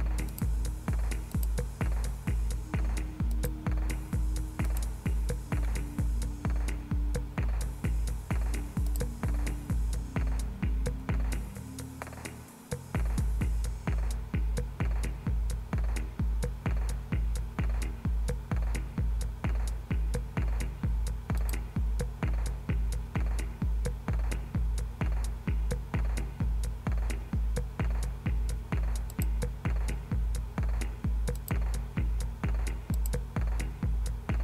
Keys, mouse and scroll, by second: 0.3 click, 1.3 click, 3.3 click, 4.7 click, 8.9 click, 21.4 click, 29.1 click, 31.4 click, 33.0 click.